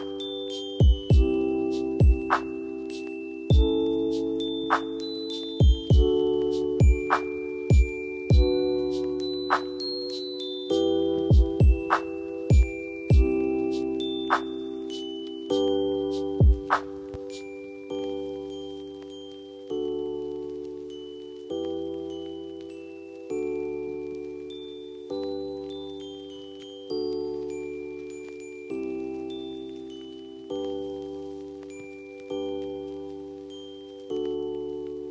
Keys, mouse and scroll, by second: 1.1-1.7 click, 1.8 Down, 3.0 Up, 3.8-4.4 click, 4.6 Up, 6.2-6.9 click, 6.9 Up, 7.9 click, 10.4 Down, 12.1 click, 13.2 F3, 13.9 F2, 14.5-15.1 drag, 30.4 ctrl+g, 31.2 shift+click, 32.2 e, 33.2 click.